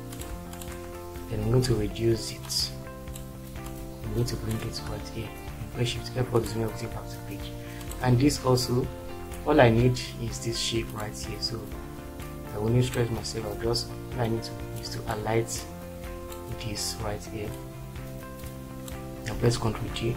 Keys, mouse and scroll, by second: 5.6 shift+F4, 9.7 Delete, 19.7 ctrl+d.